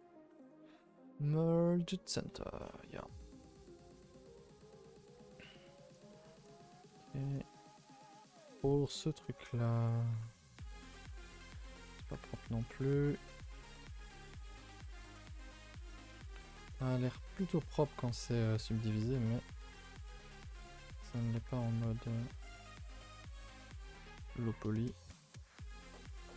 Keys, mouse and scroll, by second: 2.0 right click, 2.6-4.6 typing, 2.8 middle click, 3.0-3.6 scroll down 7, 3.6 middle click, 4.2 middle click, 4.8-7.4 middle drag, 7.4-8.8 scroll up 6, 8.1 shift+middle click, 8.8 middle click, 9.3-13.0 typing, 9.4 middle click, 10.3 click, 11.4 click, 12.1 click, 13.0 click, 13.3 click, 13.7-15.0 shift+middle drag, 15.0 click, 15.0 g, 16.7 middle click, 17.4 click, 17.5 g, 18.3 click, 18.5 g, 19.1 click, 19.2 g, 19.7 middle click, 20.6 click, 21.4 g, 22.5 click, 23.2 alt+click, 23.4-25.2 middle drag, 25.2 s.